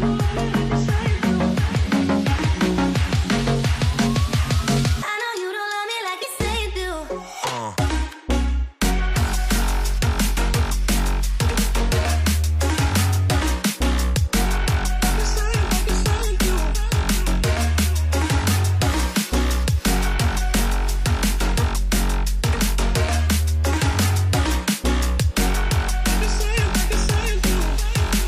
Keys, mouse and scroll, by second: 11.0-14.0 typing, 16.1 ctrl+ف, 16.9 alt+click, 17.9 ctrl+alt+click, 18.3 shift+click, 23.8 shift+click, 26.5 Return, 27.1 shift+Up, 27.3 shift+Up, 27.4 shift+Up.